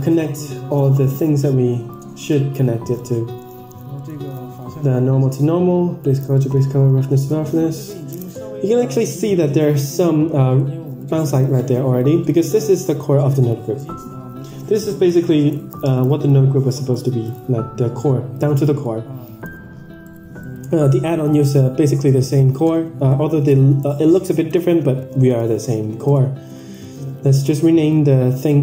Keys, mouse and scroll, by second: 1.3-2.6 drag, 3.1-3.6 middle drag, 3.9-4.3 middle drag, 5.3-6.1 drag, 6.4-6.9 middle drag, 9.9 middle click, 10.4-10.9 scroll down 4, 10.9 click, 11.9 click, 12.6 drag, 13.4 click, 15.0 ctrl+j, 16.2-16.7 drag, 17.3-18.6 right drag, 19.5 ctrl+z, 20.3-28.6 right drag.